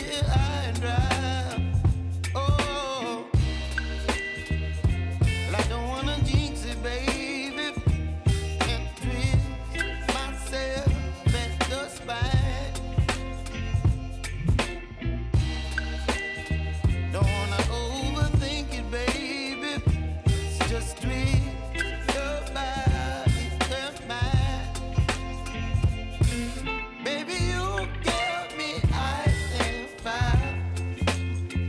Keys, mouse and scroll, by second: 0.7 click, 1.4-1.8 typing, 2.8-9.6 drag, 10.5 Return, 11.7 k, 12.4 click, 12.9 ctrl+c, 13.2 click, 14.1 ctrl+v, 15.1 click, 16.2 F9, 17.2 click, 17.5 space, 20.2 click, 20.5-21.0 typing, 23.1 click, 23.8 Return, 24.7-25.3 typing, 27.3 j, 28.0 click, 28.8 u, 29.6 click.